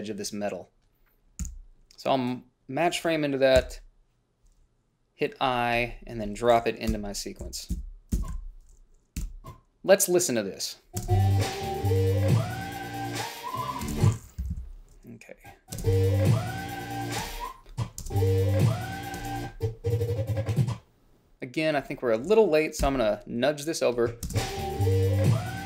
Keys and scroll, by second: 1.8 f, 3.9 i, 7.2 Up, 7.7 i, 8.0 Down, 8.4 Left, 8.7 o, 9.5 b, 11.3 space, 14.1 space, 14.7 =, 14.8 =, 16.0 space, 17.5 space, 18.3 space, 19.5 space, 23.1 ,, 24.6 space.